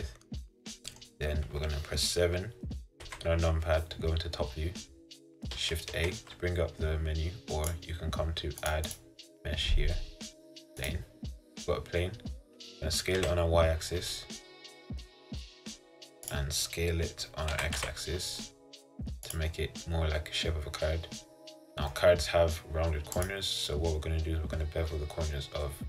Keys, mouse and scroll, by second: 3.1 KP_7, 4.4 scroll down 2, 4.7 scroll up 1, 5.0-6.0 scroll down 1, 6.0 shift+a, 7.8 click, 11.0 click, 11.6 scroll up 1, 11.9-12.2 scroll down 2, 12.2-12.6 scroll up 1, 13.3 s, 17.7 s, 21.3-22.0 scroll up 3, 22.0-23.3 middle drag, 23.3 click, 23.7 scroll up 1, 23.8-25.8 middle drag.